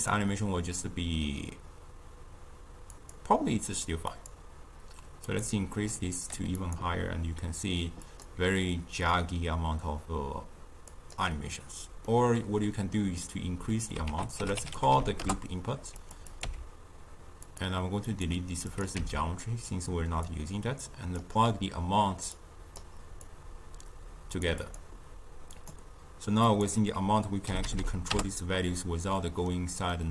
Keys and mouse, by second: 8.0 click, 12.0-14.0 middle drag, 14.0 ctrl+a, 16.3 click, 16.4 n, 17.4 click, 18.1 click, 18.6 click, 19.0 n, 20.2 drag, 22.3 click, 23.2-24.7 drag, 25.5 click, 26.4-27.7 drag, 27.7 0, 29.2-30.1 middle drag.